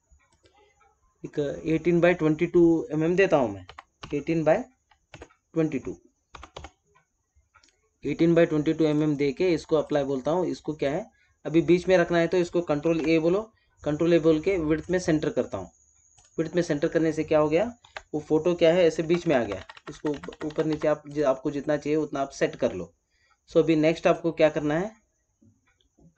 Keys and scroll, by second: 5.0 Tab, 12.7 ctrl+a, 17.7 ctrl+d, 18.9 Up.